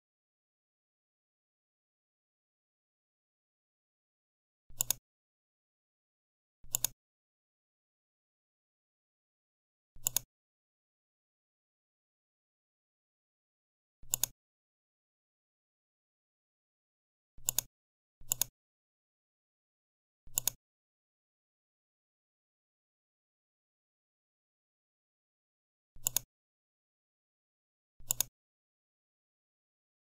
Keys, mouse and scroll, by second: 4.7 click, 6.6 click, 9.9 click, 14.0 click, 18.2 right click, 20.2 click, 25.7 click, 28.0 click.